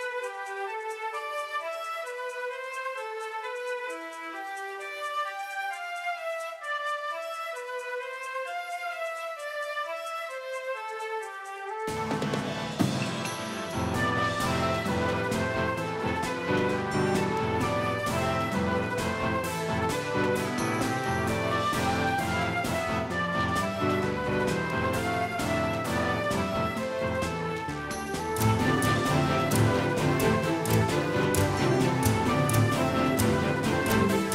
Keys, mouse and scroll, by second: 0.7-2.9 drag, 4.7-7.1 right drag, 5.5-9.6 drag, 10.4-13.1 drag, 14.4 shift+d, 25.3-27.7 drag, 28.4 middle click, 31.1 KP_1.